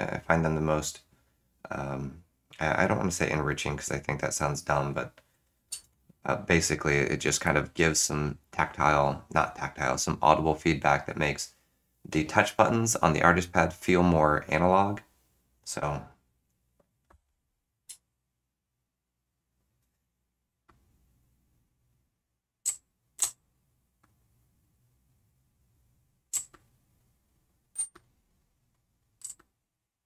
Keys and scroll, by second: 5.8 shift+super+z, 17.8 Tab, 22.4 Tab, 22.6 3, 23.2 4, 26.0-27.7 typing, 29.3 5.